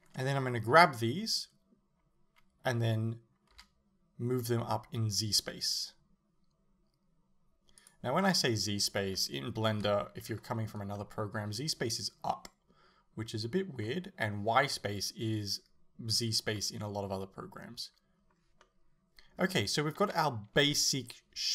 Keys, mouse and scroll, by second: 0.8 g, 7.9 click, 8.3 middle click, 9.2 shift+middle click, 10.3 a, 11.0 middle click, 20.1 KP_3, 20.5-21.5 middle drag, 20.5 KP_1.